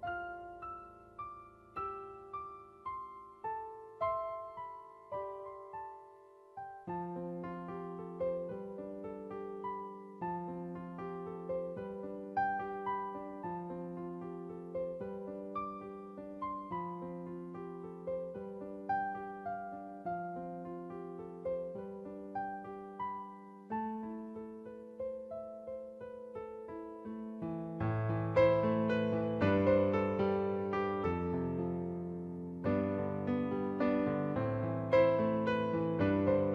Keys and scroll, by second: 6.4 space, 9.4 space, 9.7 space, 10.6 space, 10.7 space, 13.3 space, 13.9 space, 15.6 space, 15.9 space, 18.4 space, 21.2 space, 23.5 space, 27.8 space, 28.8 typing, 30.4 space, 32.0 space, 34.3 space, 35.1 ctrl+-, 35.8 space.